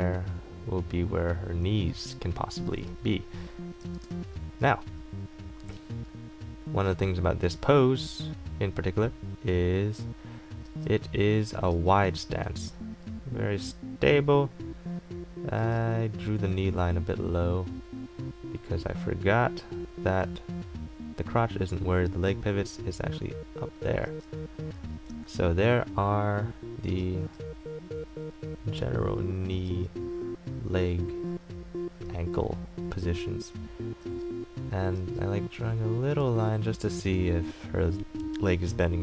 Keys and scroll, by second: 3.7-4.6 typing, 7.0 ctrl+z, 15.8 ctrl+z, 27.2 ctrl+z.